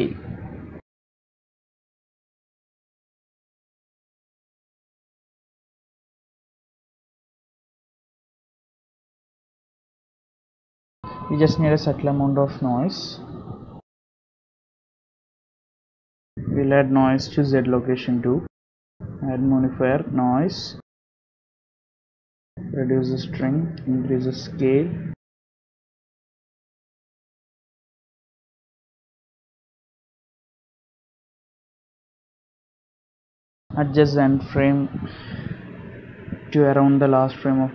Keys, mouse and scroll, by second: 1.5 click, 2.7 click, 4.8 click, 5.0 space, 6.8 space, 7.5 shift+click, 7.6 shift+click, 10.6 click, 10.9 space, 13.9 click, 16.3 space, 18.5 click, 18.6 click, 19.7 KP_Decimal, 20.4 scroll down 9, 21.4 click, 24.5 click, 26.3 click, 28.0 click, 28.1 space, 29.2 space, 30.0 click, 32.0 space, 33.0 click, 33.0 shift+middle click, 33.4 click.